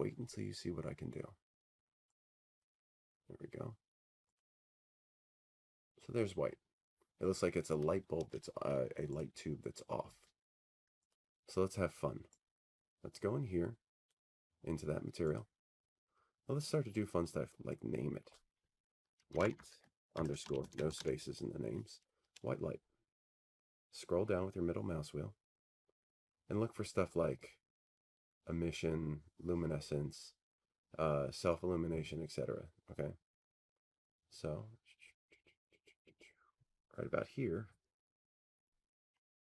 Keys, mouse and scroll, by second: 0.5 click, 2.5 click, 8.3 click, 10.0 click, 14.8 click, 16.8 click, 18.0 click, 19.6 click, 21.0 click, 22.9 click, 23.9 click, 24.5-27.0 typing, 28.9-30.4 scroll, 30.4-31.6 scroll, 31.6-32.5 scroll, 32.9-33.8 scroll, 34.5 scroll, 36.9-37.7 scroll, 37.7-39.4 scroll.